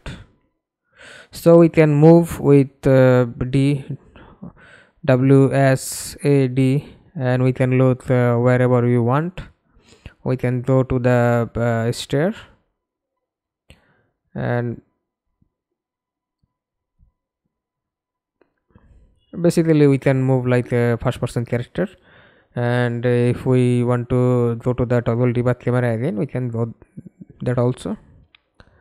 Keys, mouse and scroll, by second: 0.8-8.2 typing, 11.1 a, 13.1 a, 13.8 w, 14.3 a, 14.6 space, 15.8 a, 16.4-17.0 w, 17.3-18.4 w, 18.9 a, 20.7-22.6 typing, 23.7-26.6 typing, 27.2 Return, 27.9-28.8 typing.